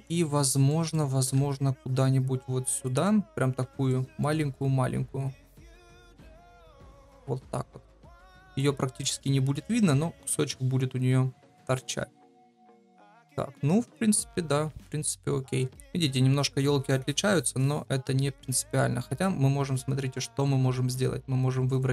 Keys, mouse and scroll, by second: 0.6 shift+middle click, 1.5 shift+d, 3.0 middle click, 3.6 shift+middle click, 4.3 shift+middle click, 4.9 s, 5.6 middle click, 6.6 g, 7.3 middle click, 9.1 middle click, 9.8 KP_0, 11.5 middle click.